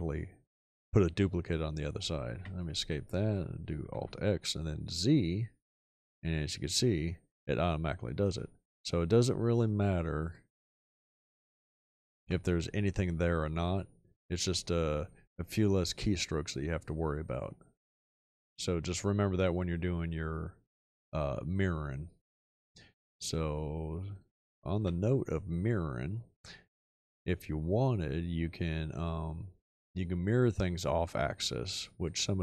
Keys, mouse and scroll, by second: 2.4 Escape, 3.9 alt+x, 5.5 z, 12.2 x, 23.2 click, 24.8 x.